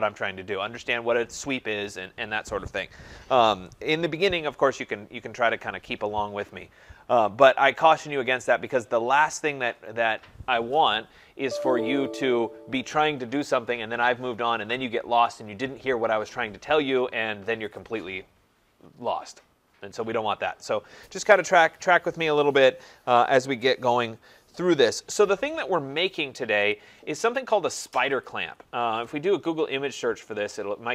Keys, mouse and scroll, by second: 9.7-14.6 drag, 26.8 click, 28.3 click.